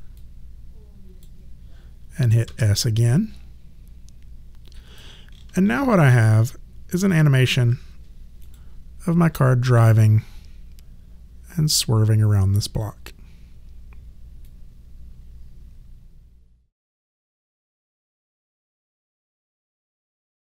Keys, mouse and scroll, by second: 0.2 click, 2.4 s, 3.0 click, 6.1 alt+click, 8.4 click, 14.4 click.